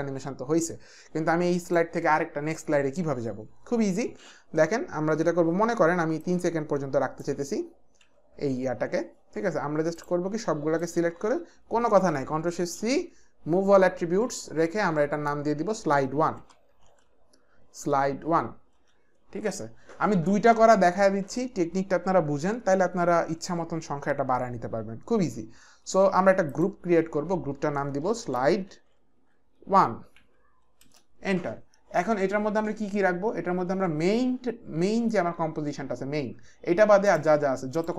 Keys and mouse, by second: 6.2 click, 8.0 Page_Up, 9.9 click, 10.8 shift+click, 12.0 ctrl+shift+c, 16.0-17.9 typing, 18.8 Return, 26.4 click, 27.9-30.2 typing, 30.8 Return, 37.1 click, 37.7 ctrl+click.